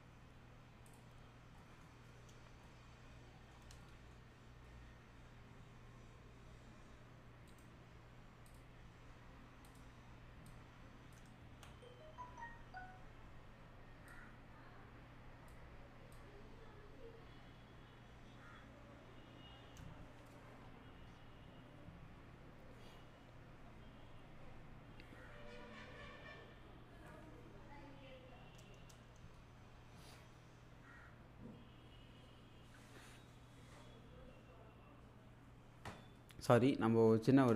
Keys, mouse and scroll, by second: 0.9 click, 1.6-3.6 middle drag, 4.5-5.1 scroll up 1, 7.5 right click, 8.5 click, 9.7 click, 11.4 ctrl+z, 14.1-15.6 drag.